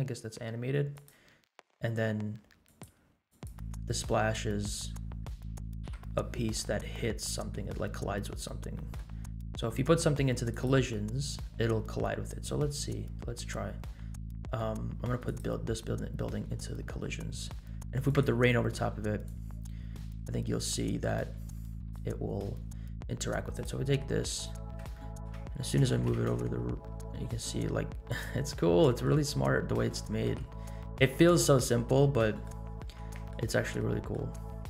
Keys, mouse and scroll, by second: 0.6 scroll down 3, 0.9-1.4 drag, 2.6 click, 3.4 click, 4.2-5.2 scroll up 8, 5.8 KP_Decimal, 6.5-7.5 middle drag, 7.8-8.5 scroll down 4, 8.7 middle drag, 9.3 scroll down 1, 10.5 click, 12.0-14.0 scroll down 10, 14.2 middle click, 14.8 scroll up 1, 15.2 click, 18.0 click, 19.2 click, 23.5 click, 24.2-24.7 scroll up 3, 24.9 shift+middle click, 26.4 g, 28.7 middle click, 29.3 scroll down 2, 30.2 KP_Decimal, 31.6-32.5 middle drag, 32.8 middle click, 33.6 scroll up 1, 34.0 middle click, 34.5 scroll down 2.